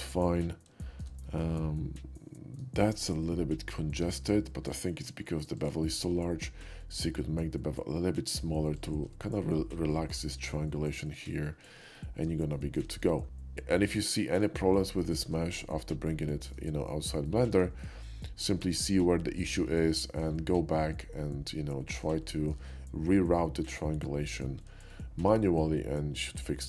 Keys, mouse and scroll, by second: 0.1 shift+middle click, 0.8 shift+middle click, 1.3-2.7 shift+middle drag, 4.1 Tab, 4.7 q, 5.6 click, 8.8 shift+click, 10.5-11.1 shift+middle drag, 11.3 scroll down 1, 11.6 shift+middle click, 12.0 middle drag, 12.6 shift+middle drag, 13.9 middle click, 15.0 shift+middle drag, 15.6-16.6 shift+middle drag, 17.3 shift+middle drag, 17.8-18.5 shift+middle drag, 20.0 shift+middle click, 21.5-22.1 shift+middle drag, 22.3 shift+middle drag, 23.7-24.5 shift+middle drag, 24.7 shift+middle click, 25.0 shift+middle drag.